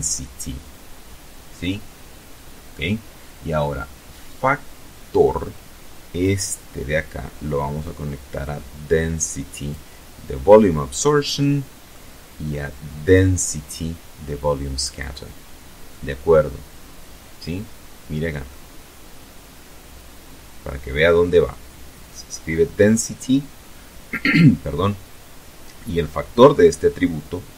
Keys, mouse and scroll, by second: 4.2-8.0 drag, 9.4 middle click, 11.1-13.2 drag, 14.0-16.7 middle drag.